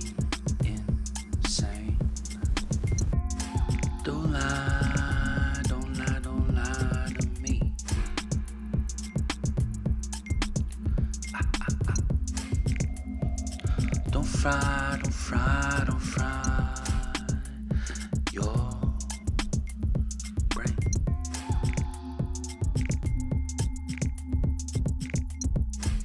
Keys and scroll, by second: 0.0-0.8 typing, 1.2 Return, 5.1-7.5 typing, 11.6 ctrl+t, 13.7 Return, 14.7 ctrl+t, 19.4 Return, 20.1 space.